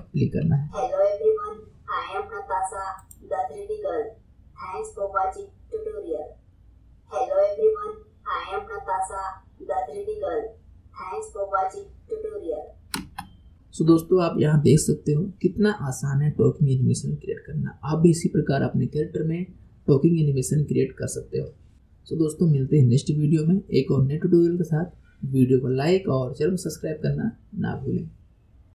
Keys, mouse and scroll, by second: 0.6 space, 3.0 click, 13.0 space.